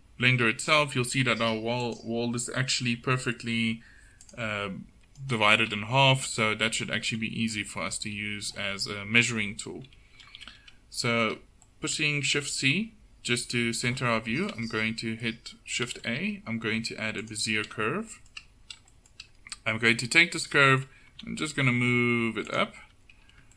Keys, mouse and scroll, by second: 5.3-7.1 drag, 7.1 a, 10.6 shift+c, 15.9 shift+a, 21.2 g, 22.9 Tab.